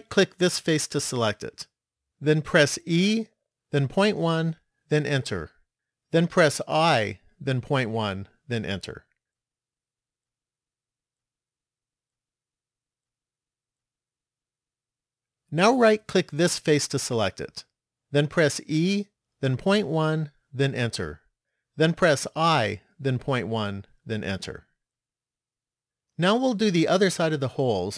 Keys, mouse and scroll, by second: 0.5 right click, 2.9 e, 6.5 i, 10.8 middle click, 12.9 shift+middle click, 16.0 right click, 18.6 e, 22.6 i, 27.4 middle click.